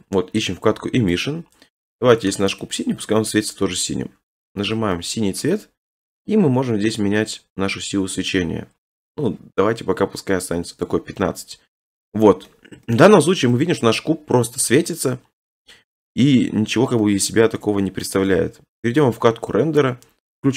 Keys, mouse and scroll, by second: 1.3 click, 2.6 click, 4.4 click, 5.4 shift+middle click, 10.9 right click, 12.5 middle click, 13.3 middle click, 14.7-15.3 scroll, 15.3 middle click, 16.2-17.7 middle drag, 17.7-18.1 scroll, 19.2 click, 19.8-20.5 scroll.